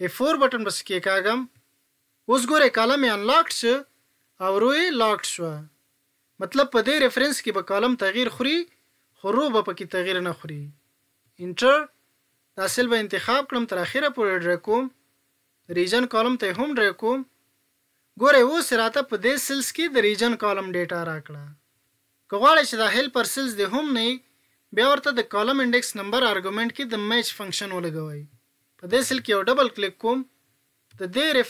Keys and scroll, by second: 0.0 F4.